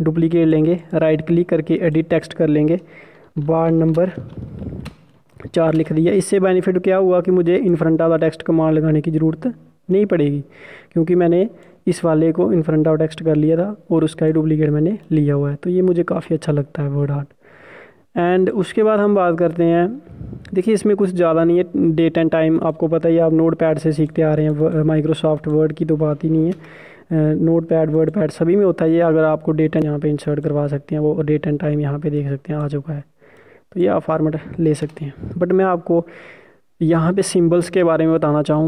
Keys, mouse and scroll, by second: 0.5 click, 1.6 right click, 2.7 click, 3.6-5.7 typing, 8.4 click, 16.7-17.2 scroll up 1, 17.2-19.1 scroll up 1, 19.1-21.4 scroll down 1, 21.4 click, 23.3 Num_Lock, 23.3 Caps_Lock, 23.3 click, 27.4 Return, 28.4 scroll up 1, 28.8 click, 32.7 scroll up 1, 33.1 click, 37.7 BackSpace.